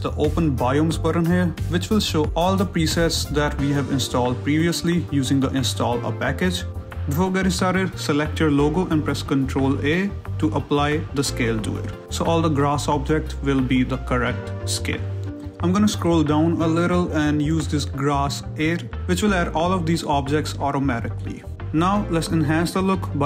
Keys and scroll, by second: 8.0 ctrl+a, 21.5 shift+z.